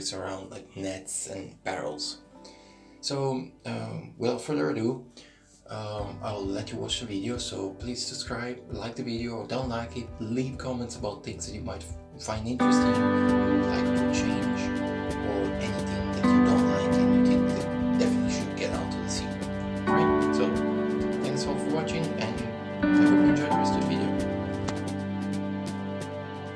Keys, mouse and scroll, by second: 0.9 ctrl+z, 1.0 e, 2.2 ctrl+z, 3.1 shift+right click, 4.0 e, 6.3 middle click, 7.3 ctrl+z, 8.7 shift+right click, 10.3 shift+right click, 10.5 middle click, 11.7 e, 15.3 middle click, 17.9 middle click, 17.9-18.8 scroll up 3, 19.2 middle click, 19.8 scroll down 1, 20.6 scroll down 2, 21.1 right click, 22.7 click.